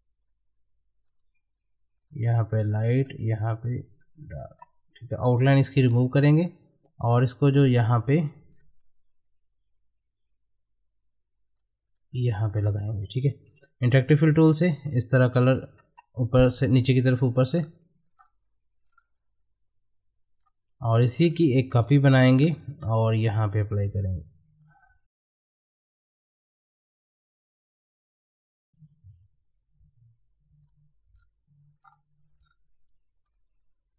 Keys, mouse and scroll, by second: 0.2-2.0 ctrl+drag, 4.5 space, 5.8 right click, 6.4-8.5 drag, 8.5 scroll up 1, 8.8-11.9 drag, 11.9 middle click, 12.5 scroll up 1, 13.5 g, 14.6-15.8 ctrl+drag, 15.8 space, 21.3 click, 21.7 ctrl+right click, 22.2 middle click, 22.9-26.5 drag, 26.5 middle click, 27.1 click, 28.0 scroll up 1, 28.6-31.1 drag, 31.1 scroll down 1, 33.3-33.9 drag.